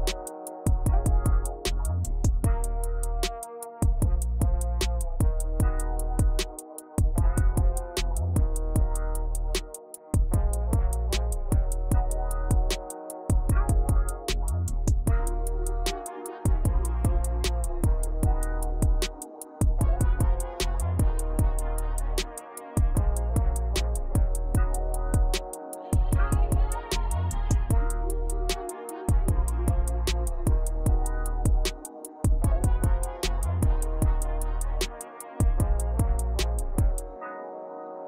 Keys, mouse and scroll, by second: 1.5 Tab, 1.8 middle click, 2.5-2.9 scroll up 3, 2.9-4.6 middle drag, 6.1 scroll up 5, 6.5 drag, 7.2 Tab, 8.5-8.8 scroll down 4, 8.8 shift+middle click, 9.3-10.7 scroll up 4, 10.9-11.3 scroll down 8, 12.0 Tab, 12.4 scroll down 3, 12.7-14.8 shift+middle drag, 15.1-16.0 shift+middle drag, 16.0 click, 17.3 scroll down 3, 17.5 middle click, 18.1-19.7 drag, 20.7-21.2 scroll up 8, 21.3-23.0 middle drag, 25.2 click, 27.2 click, 28.5 click, 29.4 KP_0, 31.9-33.1 drag, 35.4 Tab, 36.2-37.7 shift+middle drag.